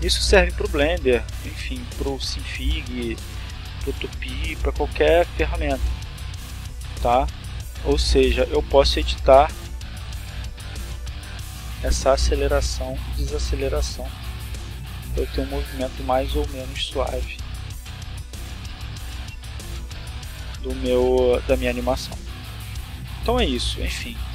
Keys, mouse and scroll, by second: 1.3 click, 2.2 click, 3.3-4.6 drag, 5.8 click, 7.0 click, 7.9 click, 8.4-9.8 drag, 10.4 click, 11.7 click, 13.2-14.6 drag, 15.1 click, 16.0 click, 17.8 a, 18.7-20.2 drag, 21.2 click, 24.1 click.